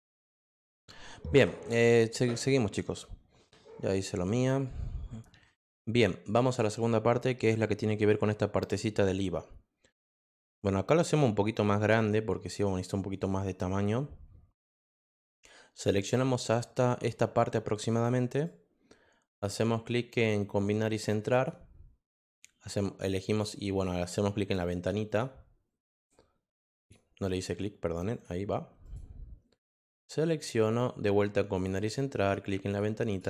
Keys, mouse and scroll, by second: 5.9 click, 6.4 click, 11.1-12.5 drag, 15.4-17.9 drag, 21.3 click, 22.3-23.4 drag, 23.7 click, 25.0 click, 25.8 click, 26.8 click, 28.1 click, 28.8 click, 29.7 click, 31.5 click, 32.7 click, 33.1 click.